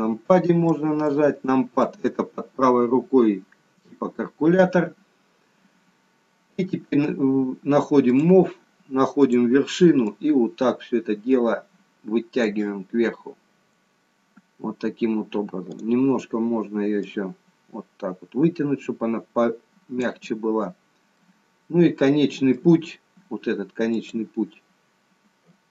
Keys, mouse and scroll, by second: 1.1 shift+middle click, 8.0 click, 9.1 click, 10.0 click, 13.9-14.8 scroll down 1, 14.8-15.9 scroll down 2, 16.0 click, 17.0 click, 21.1 middle click, 24.1 click.